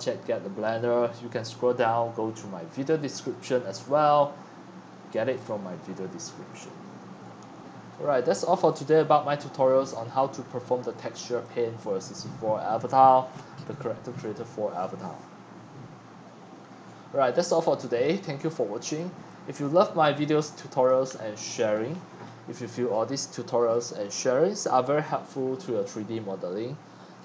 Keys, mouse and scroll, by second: 0.6 click, 5.3 click, 5.6-6.3 drag, 6.3-7.4 scroll down 6, 7.4-7.8 scroll, 9.9 click, 10.2-10.9 middle drag, 10.2 scroll, 10.3 scroll, 10.5 scroll, 10.6 scroll down 1, 10.6 scroll down 1, 10.7 scroll down 1, 11.0-11.3 middle drag, 11.0-11.3 scroll up 1, 11.3 c, 12.1-15.1 drag, 15.1 right click, 15.6-16.3 scroll down 6, 16.3 scroll up 6, 16.3 scroll down 2, 16.4 scroll up 6, 16.5-17.4 scroll down 10, 18.0 click, 18.5-20.6 typing, 18.9 click, 19.6-20.0 drag.